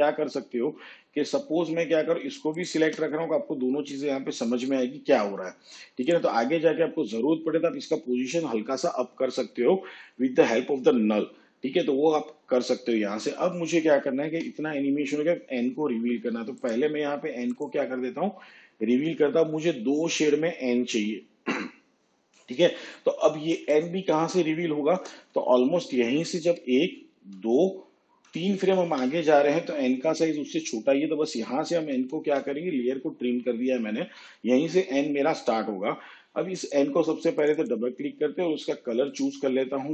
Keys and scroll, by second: 14.3 shift+/, 26.4 ctrl+Right, 32.0 alt+[.